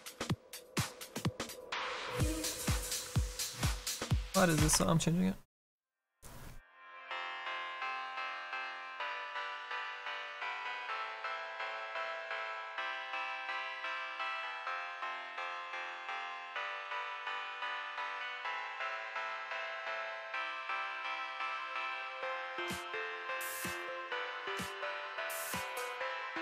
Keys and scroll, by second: 12.9 s, 21.0 s, 25.3 s.